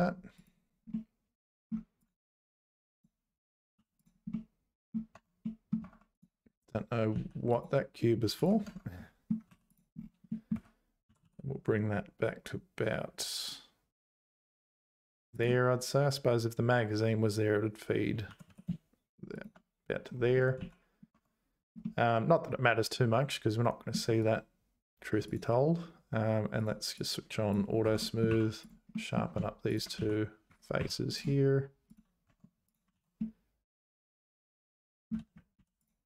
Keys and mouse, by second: 0.4 click, 0.9 middle click, 2.0 click, 2.9 click, 3.7 h, 4.0 click, 4.3 middle click, 5.1 Tab, 5.4 middle click, 5.8 Tab, 7.2 x, 8.7 Tab, 9.0 middle click, 9.5 3, 9.7 click, 10.3 middle click, 10.5 `, 11.1 g, 18.3 g, 20.6 z, 21.1 Tab, 21.8-23.9 middle drag, 24.3-25.3 right drag, 26.6 click, 27.0 click, 27.8 Tab, 28.0 middle click, 28.3 3, 28.6 click, 28.9 middle click, 29.7 shift+click, 30.0 x, 30.8 2, 31.2 right click, 32.3 Tab, 32.7 click, 32.9 ctrl+s, 33.2-35.1 middle drag, 35.6 alt+h.